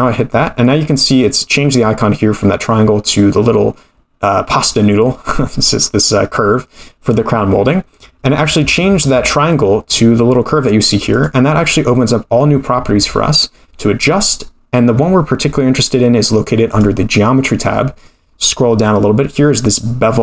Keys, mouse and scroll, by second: 11.1 click, 12.2-13.2 scroll down 3, 13.2-13.6 scroll down 1, 16.7 click, 17.5-19.7 scroll down 8.